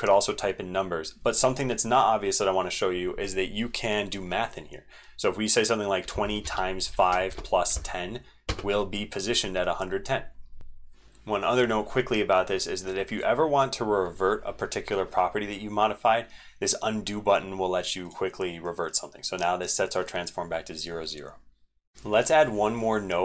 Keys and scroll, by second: 10.7 ctrl+v, 10.7 ctrl+x, 10.7 super+2, 21.7 ctrl+z, 21.8 ctrl+z, 21.8 ctrl+v.